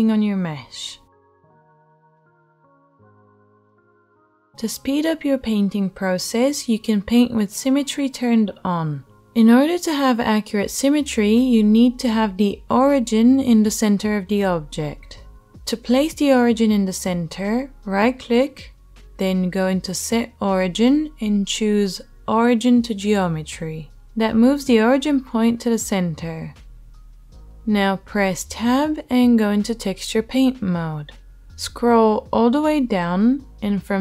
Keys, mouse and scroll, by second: 4.1 ctrl+z, 14.3 Tab, 16.8-25.8 middle drag, 16.8-25.8 right drag, 26.8 Tab.